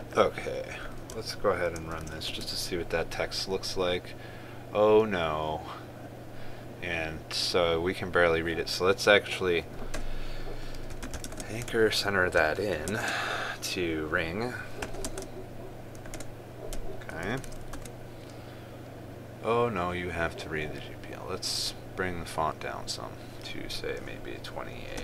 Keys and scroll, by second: 2.5 ctrl+s, 3.0 ctrl+r, 12.0 ctrl+space, 13.7 ctrl+space, 15.8 ctrl+space, 17.9 ctrl+s, 18.4 ctrl+r.